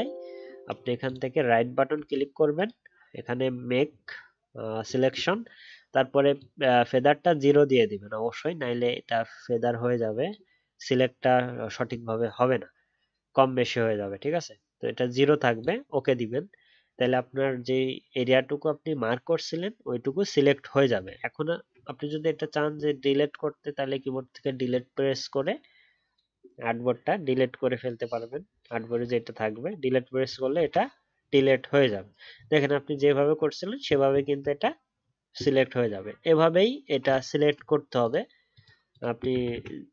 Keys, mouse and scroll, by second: 21.0-21.6 alt+scroll down 1, 32.2 alt+scroll up 1, 33.8 alt+scroll down 1, 36.3-36.6 alt+scroll up 1, 39.3 ctrl+z, 39.5 ctrl+z.